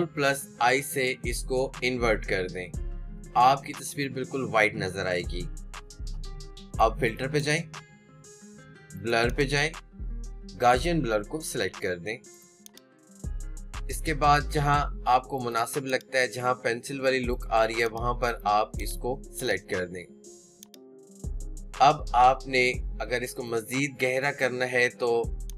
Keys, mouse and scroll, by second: 0.0 click, 0.8 ctrl+i, 14.0 click, 15.8 click, 20.6 click.